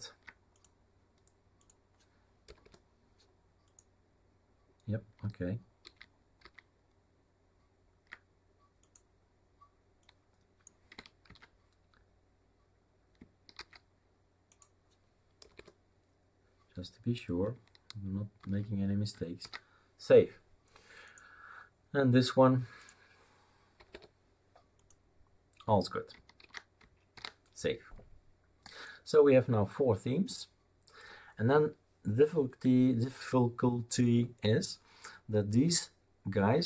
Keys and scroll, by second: 2.4 BackSpace, 2.6 BackSpace, 5.8 ctrl+z, 6.4 ctrl+z, 11.2 ctrl+v, 13.5 ctrl+s, 15.4 BackSpace, 15.5 BackSpace, 18.4 ctrl+z, 19.4 ctrl+s, 23.8 BackSpace, 23.9 BackSpace, 26.4 ctrl+z, 27.1 ctrl+s.